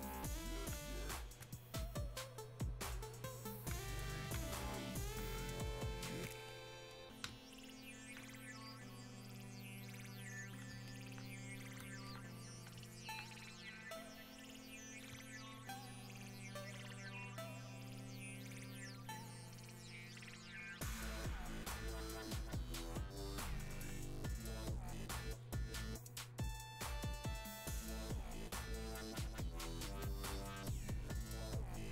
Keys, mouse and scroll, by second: 5.0 alt+click, 6.5-31.9 drag.